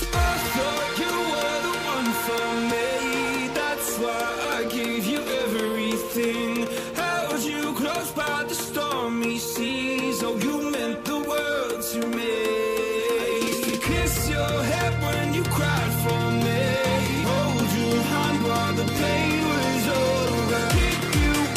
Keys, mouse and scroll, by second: 3.7 shift+click, 5.4 Return, 9.5 alt+click, 10.9 double click, 14.9 ctrl+t, 18.9 Return, 19.6 right click, 20.3 Return.